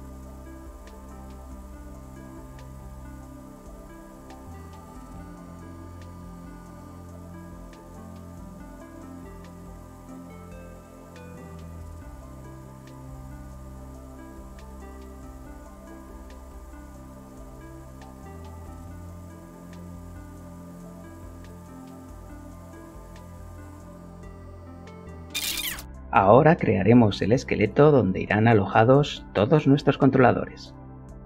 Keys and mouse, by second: 0.2 middle click, 0.3-2.6 middle drag, 0.4 Tab, 1.8 click, 2.1 shift+f, 2.5 Return, 2.7 Tab, 3.3 click, 3.6 g, 4.3 click, 4.7 g, 5.6 click, 5.6 g, 5.8 middle click, 6.1 click, 7.4 Tab, 8.1 click, 9.7 click, 9.9 click, 10.3 Return, 10.7 shift+g, 11.4 click, 11.6 click, 11.9 Tab, 12.6 click, 12.8 click, 13.1 g, 14.6 g, 14.8 click, 15.9 g, 16.1 click, 16.3 Tab, 17.8 click, 18.1 click, 18.4 click, 18.8 click, 19.1 click, 19.3 click, 19.6 click, 20.3 shift+h, 20.5 Return, 20.8 Tab, 21.7 g, 22.1 click, 22.5 g, 22.8 click, 23.4 g, 23.6 click, 23.7 middle click, 23.9 Tab, 24.3 ctrl+l, 24.9 shift+middle click, 25.8 shift+a, 25.8 ctrl+super+middle click, 26.7-28.1 shift+middle drag, 29.6 shift+a, 31.1 click.